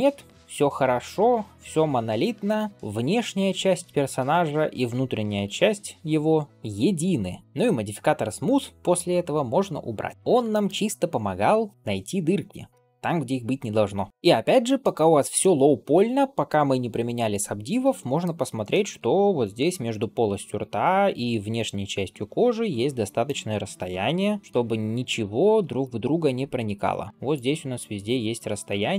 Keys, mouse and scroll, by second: 5.5-6.0 scroll down 3, 6.1 shift+middle drag, 6.5-7.4 middle drag, 7.4 ctrl+space, 10.1 ctrl+space, 10.1 click, 10.3 shift+middle drag, 10.7-11.6 middle drag, 13.1 ctrl+s, 14.1 scroll up 2, 14.5 shift+middle drag, 15.2-18.1 middle drag, 18.3 scroll up 1, 18.5 middle click, 18.9 scroll up 1, 19.1 scroll down 1, 20.2-28.9 typing, 20.4 click, 23.1 click, 23.9 click, 24.4 middle click, 24.8 click, 25.7 click, 26.2 middle click, 26.9 click, 27.2 click, 27.6 click, 28.0 click, 28.6 middle click.